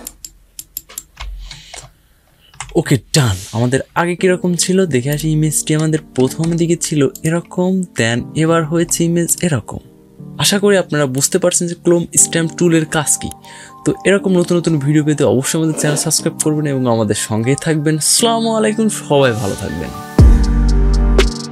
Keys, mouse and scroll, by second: 0.0 typing, 1.1-1.7 alt+scroll down 3, 2.1 alt+scroll up 1, 4.8 click, 5.4 scroll up 1, 6.9 click, 7.7 scroll down 1, 9.0 click, 9.9 typing.